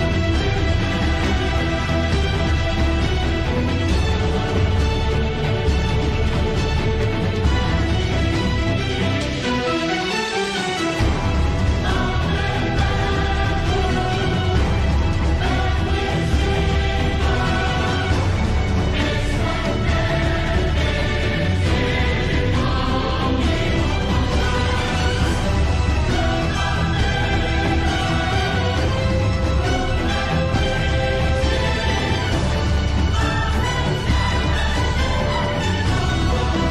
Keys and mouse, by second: 1.6 g, 7.3 middle click, 9.2 middle click, 11.8 KP_1, 13.4 middle click, 14.9 KP_7, 20.7 alt+g, 22.1 alt+r, 23.7 KP_1, 25.5 g, 28.2 KP_0, 30.9 g.